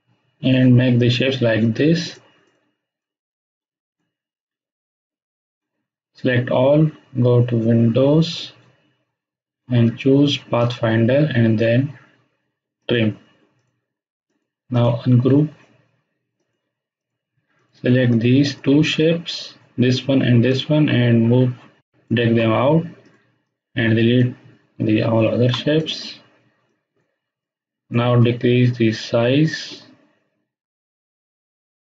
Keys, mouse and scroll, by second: 8.2 click, 10.5 click, 14.7 right click, 15.2 right click, 16.3 click, 18.4 shift+click, 20.4-22.0 drag, 25.3 Delete, 25.7-28.0 drag, 29.8-31.9 alt+shift+drag.